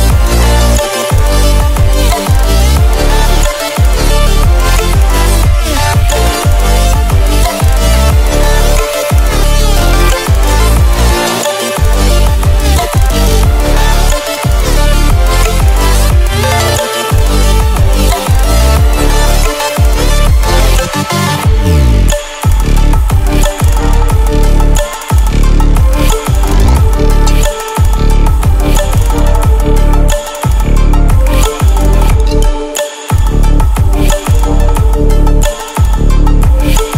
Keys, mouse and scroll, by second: 0.9 click, 6.9 click, 9.8 ctrl+alt+scroll down 1, 10.7 ctrl+alt+scroll up 1, 13.2 click, 15.9 click, 20.8 click, 22.7-23.0 alt+scroll down 2, 25.2-25.9 typing, 25.2 click, 30.8-32.9 drag, 33.6 scroll up 1, 34.9 click, 36.2 ctrl+alt+scroll up 1.